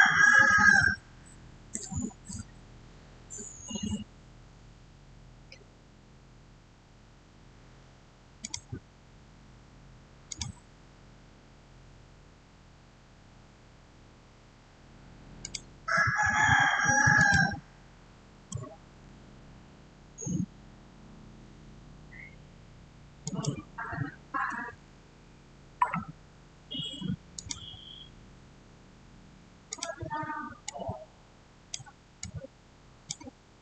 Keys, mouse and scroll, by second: 8.3 click, 15.3 click, 18.2 Return, 23.1 click, 27.2 click, 29.5-33.6 drag.